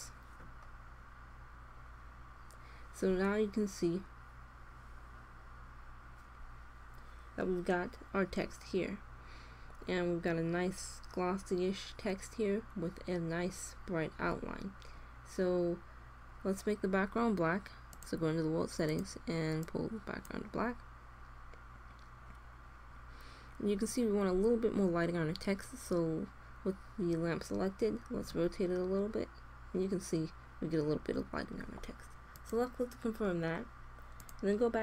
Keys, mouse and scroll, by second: 3.4-6.9 middle drag, 7.5-9.3 middle drag, 9.8-11.7 middle drag, 14.4-15.8 middle drag, 17.9-20.7 drag, 24.5-26.5 middle drag, 28.2 r, 34.2-34.8 drag.